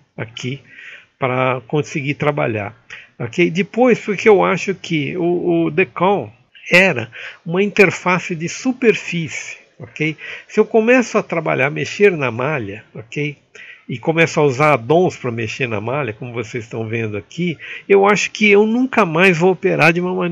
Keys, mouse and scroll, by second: 0.5 shift+middle click, 0.9 shift+middle click, 1.4 shift+middle click, 3.0-4.3 shift+middle drag, 4.3 shift+space, 4.5 Pause, 4.9-12.5 shift+middle drag, 12.5 x, 13.1 Page_Up, 15.5 shift+middle click, 16.4 Pause, 17.2 shift+space.